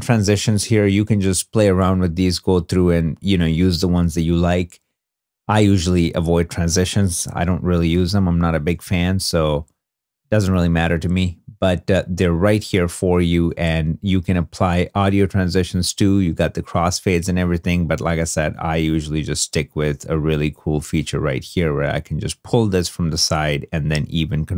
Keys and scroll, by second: 7.6 i, 9.8 2.